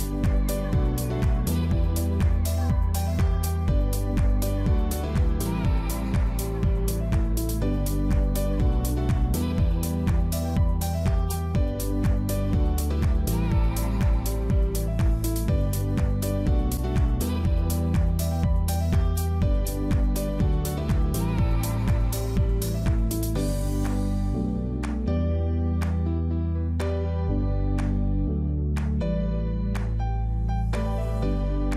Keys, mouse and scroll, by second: 0.4 shift+click, 0.8 click, 1.3 shift+click, 1.6-2.0 scroll down 2, 1.7 middle click, 2.2 ctrl+b, 4.2 middle click, 6.5 click, 6.6 middle click, 8.3 click, 8.7 click, 8.9 middle click, 10.3 click, 10.5 middle click, 11.0-11.5 scroll down 2, 11.2 middle click, 11.9 g, 15.8 middle click, 16.5 click, 16.7 middle click, 17.3 ctrl+r, 18.1 middle click, 20.1-20.5 scroll up 2, 20.3 middle click, 22.3 click, 22.5 scroll up 1, 22.6 middle click, 23.1 shift+click, 23.7 alt+shift+click, 24.2 alt+shift+click, 24.6 middle click, 25.9 alt+shift+click, 26.1 alt+shift+click, 26.5 middle click, 27.6 c, 28.5 middle click, 30.1 shift+click, 30.9 shift+click, 31.4 shift+click.